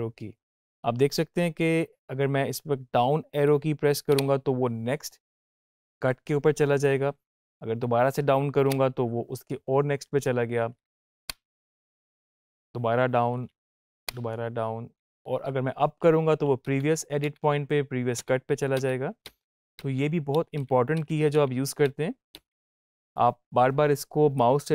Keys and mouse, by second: 0.0 -, 4.0 Down, 8.5 Down, 11.0 Down, 13.8 Down, 16.4 Up, 18.6 Up, 24.2-24.7 drag.